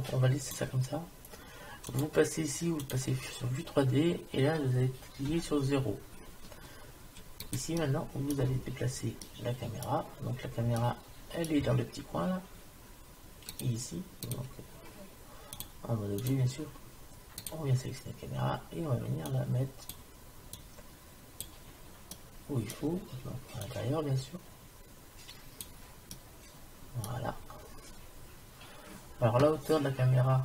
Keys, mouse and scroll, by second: 2.9 click, 5.4 KP_0, 7.4-8.5 middle drag, 19.3 click, 20.6 click, 23.7-25.7 drag, 26.2-30.4 middle drag.